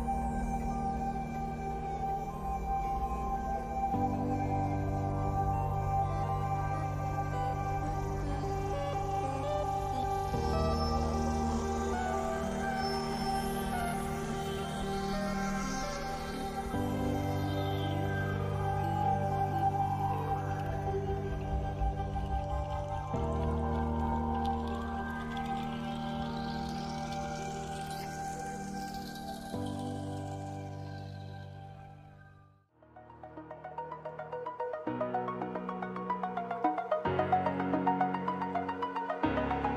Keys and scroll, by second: 7.1 ctrl+t, 27.3 ctrl+=, 39.1 ].